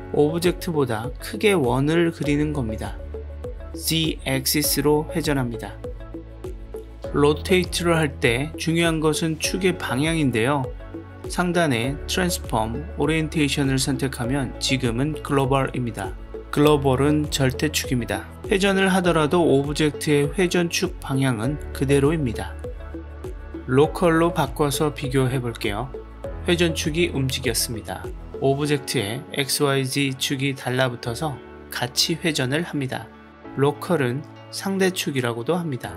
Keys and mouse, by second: 5.1 click, 5.4-8.3 drag, 12.5-16.4 drag, 17.4-18.7 middle drag, 20.6-24.5 middle drag, 25.9-28.0 drag, 28.9-29.9 middle drag, 31.6 click, 32.6 drag, 33.7 click, 35.4 click, 35.6 click.